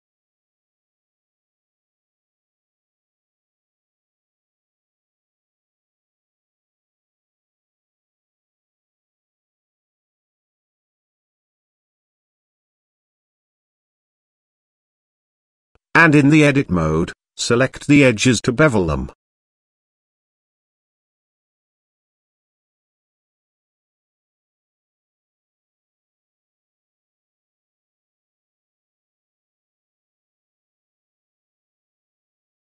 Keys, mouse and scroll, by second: 1.1 middle click, 1.8 KP_0, 3.6 click, 5.1 click, 6.0 click, 6.9 click, 9.7 middle click, 10.5 KP_Decimal, 11.0 middle click, 11.6 s, 13.1 middle click, 14.3 ctrl+a, 15.3 Tab, 16.2 click, 17.3 click, 18.8 alt+click, 21.3 alt+shift+click, 22.6 alt+shift+click, 23.3 middle click, 24.7 ctrl+b, 28.9 Tab, 29.6 middle click, 30.5 middle click, 31.0 s, 32.3 s.